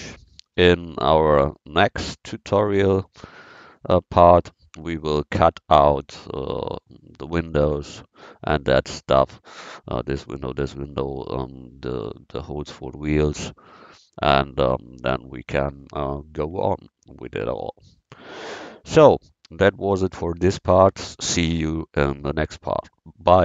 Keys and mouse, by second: 1.0 KP_1, 2.5-3.8 drag, 9.3 middle click, 17.7 middle click.